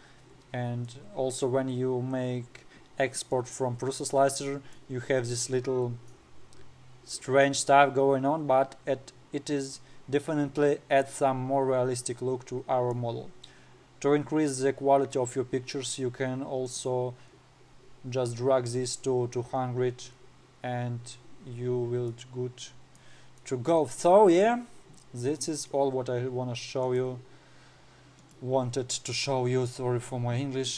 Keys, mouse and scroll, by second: 0.7-1.4 scroll down 10, 1.4-2.3 middle drag, 2.3-3.8 scroll down 4, 3.8-6.2 middle drag, 3.9 scroll down 3, 6.2-6.8 scroll down 1, 6.8-7.8 scroll down 1, 7.8-9.2 scroll down 1, 9.3-9.9 scroll down 1, 9.9-11.5 scroll up 3, 11.5-14.6 middle drag, 14.6-15.7 scroll down 4, 15.7-16.7 scroll up 6, 17.2 click, 21.6-22.6 scroll up 5, 22.6-25.4 middle drag, 25.4-26.0 scroll up 3, 26.0-26.3 scroll down 5.